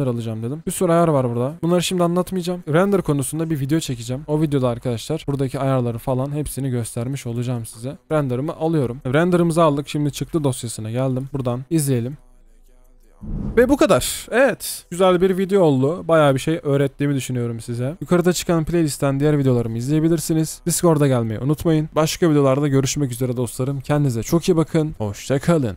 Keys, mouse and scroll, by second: 11.3 double click.